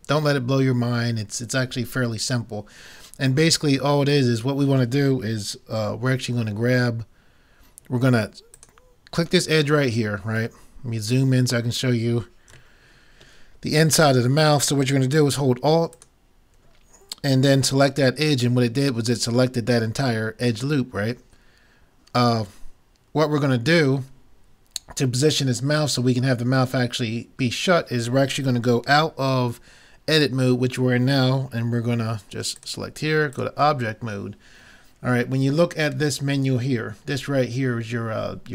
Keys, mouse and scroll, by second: 8.6-10.4 right drag, 10.6-11.7 middle drag, 12.2 middle click, 16.0-17.7 drag, 17.7 middle click, 33.4 click.